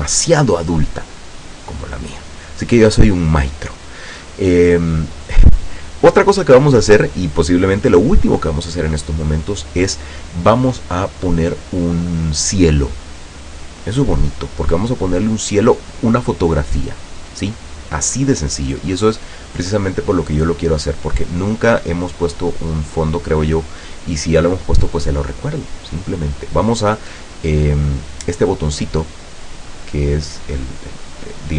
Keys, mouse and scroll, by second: 29.7 click.